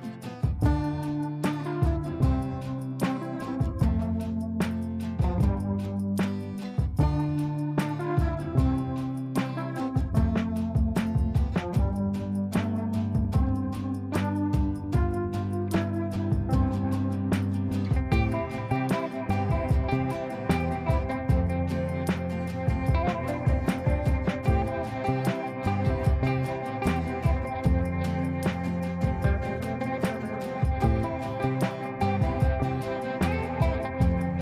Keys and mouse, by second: 0.7 ctrl+space, 2.3 click, 3.8 s, 8.3 click, 8.3 click, 14.6 click, 17.6-20.6 drag, 26.0-27.9 shift+drag, 31.7 c, 32.7-34.4 drag.